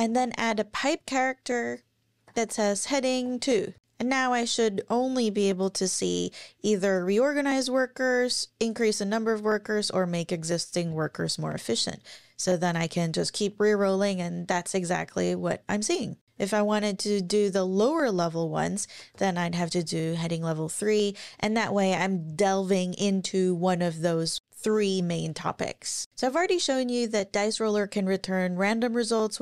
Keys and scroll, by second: 0.0 shift+\, 2.0-3.2 typing, 3.7 Up, 16.5 Down, 17.6 Left, 18.8 Left, 19.1 BackSpace.